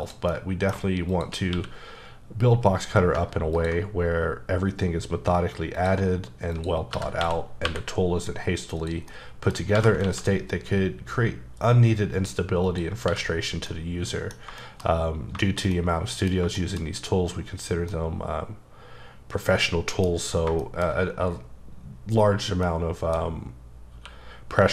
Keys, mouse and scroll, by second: 0.0 click, 0.3 middle click, 1.1 click, 1.5 q, 3.5 ctrl+click, 6.5 click, 6.9-7.6 typing, 8.8 click, 9.1 middle click, 9.5 scroll up 2, 9.7 g, 10.0 x, 12.6 click, 13.0 h, 13.1-13.7 scroll down 2, 13.7 middle click, 14.3 scroll down 2, 14.6 shift+middle click, 15.0-15.3 scroll down 2, 15.4 shift+middle click, 16.9 scroll up 1, 17.9 middle click, 23.9 q.